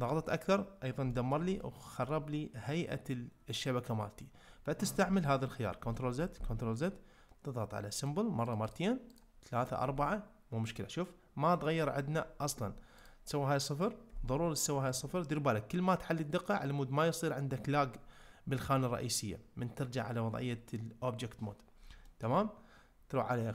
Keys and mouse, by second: 1.1 ctrl+middle click, 1.6-2.1 middle drag, 5.8 ctrl+z, 8.4 click, 8.6 click, 11.0-11.8 middle drag, 13.1-14.9 drag, 22.1 ctrl+middle click.